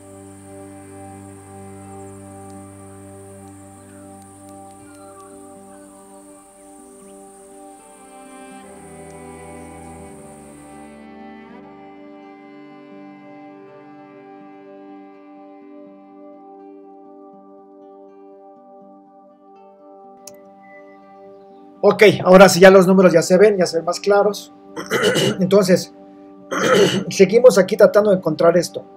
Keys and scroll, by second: 0.3 super++, 0.4 super+space, 1.1 super+d, 7.1 super+v, 10.3 super+-, 10.5 super+space, 10.8 v, 12.7 super++, 13.1 i, 18.6 super+c, 18.7 super+v, 20.3 super+0.